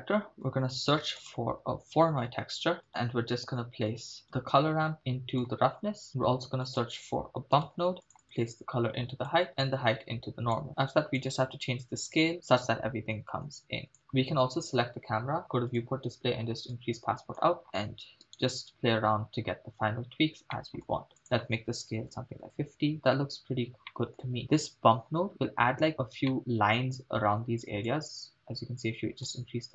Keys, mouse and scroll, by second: 0.9 shift+a, 2.5 o, 2.9 middle click, 2.9-3.9 scroll down 1, 3.9-5.7 drag, 6.2 shift+a, 8.2-9.3 drag, 9.9 click, 11.2-14.0 drag, 14.0 right click, 15.7 click, 16.0-16.7 scroll down 2, 16.7 click, 17.6-18.3 scroll down 2, 18.5 click, 18.5 right click, 19.7-20.3 scroll up 2, 20.5 middle click, 21.2-22.5 drag, 22.9 scroll down 1, 23.9-24.3 middle drag, 25.1-26.3 scroll up 3, 26.3 shift+middle click, 27.9-29.4 drag.